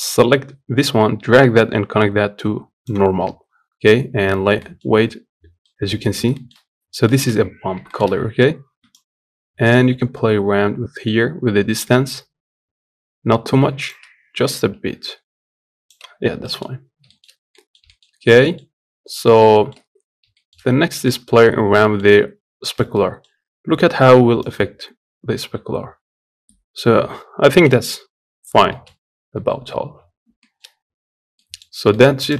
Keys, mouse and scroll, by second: 3.9-4.4 scroll up 3, 4.4 middle click, 4.6 scroll up 1, 5.1-5.4 scroll down 3, 5.6 middle click, 5.8 scroll up 2, 6.1 shift+middle click, 6.4-6.8 scroll up 1, 6.8-8.8 shift+middle drag, 8.8-15.9 shift+drag, 15.9 scroll down 2, 16.2 middle click, 16.6 scroll down 1, 16.8 shift+middle click, 17.0 scroll up 1, 17.3 middle click, 17.8-18.2 scroll up 1, 18.2 middle click, 18.4-19.8 scroll down 3, 21.3 scroll up 4, 21.6-24.2 shift+middle drag, 24.2-30.9 drag, 30.9 scroll down 4, 31.1 middle click, 31.4 scroll up 2, 31.7 shift+middle click, 31.9 click, 32.2 scroll down 4.